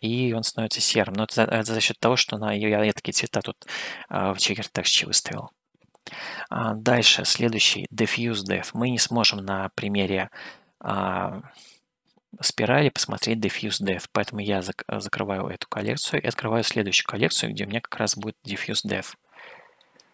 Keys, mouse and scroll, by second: 2.1 middle click, 4.2-5.5 middle drag, 15.0 click, 16.0 click, 16.7-18.1 middle drag, 19.1 shift+middle click.